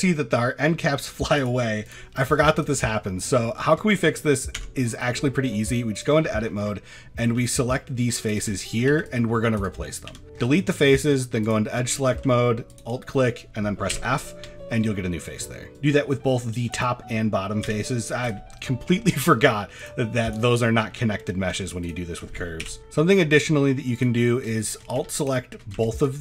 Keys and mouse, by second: 0.0 middle drag, 1.8 click, 2.9 middle click, 3.4 middle click, 3.8 shift+middle click, 4.6 Tab, 5.9 click, 6.3 shift+middle click, 7.2 c, 8.5 shift+middle click, 8.9 c, 9.6 right click, 10.1 x, 10.6 middle drag, 11.4 click, 11.8 shift+middle click, 12.7 alt+click, 13.9 f, 14.5 shift+middle click, 15.5 shift+middle click, 15.7 c, 17.6 x, 18.7 middle click, 19.8 click, 21.0 middle drag, 22.6 f, 25.9 alt+shift+click.